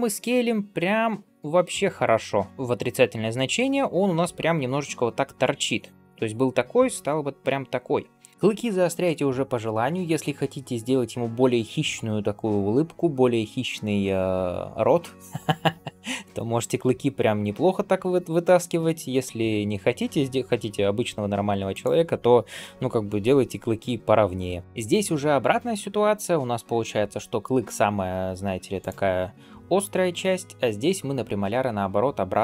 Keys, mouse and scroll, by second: 22.3 scroll down 1, 22.7-24.5 scroll up 2, 24.5 scroll down 1.